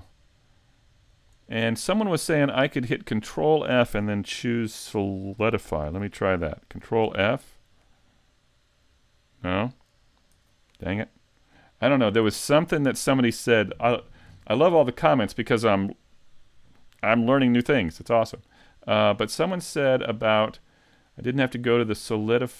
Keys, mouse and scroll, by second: 1.1 click, 2.4 middle click, 7.0 ctrl+f, 10.4 z, 11.1 middle click, 12.3 middle click, 18.6 middle click, 21.1 click.